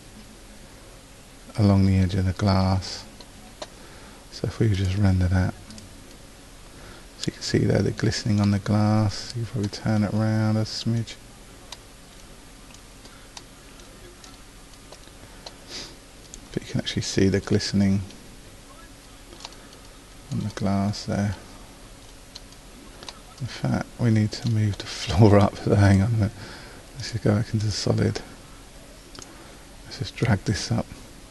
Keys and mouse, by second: 4.8 click, 5.3 click, 27.2 click, 29.2-30.3 middle drag, 30.3-31.3 drag.